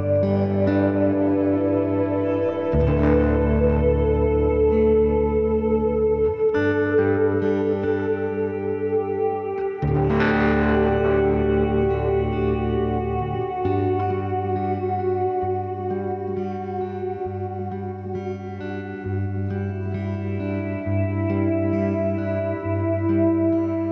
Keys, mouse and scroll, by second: 0.2 b, 0.5 g, 2.8 g, 6.3-8.0 right drag, 6.5 b, 6.9 g, 8.7 b, 9.2 g, 11.6-13.8 middle drag, 12.7 ctrl+r, 13.8-15.7 drag, 14.2 b, 14.4 g, 16.3 ctrl+r, 17.5-19.3 right drag, 17.7 b, 18.1 g, 19.4 ctrl+s, 22.1-23.9 right drag, 23.0 b, 23.4 g.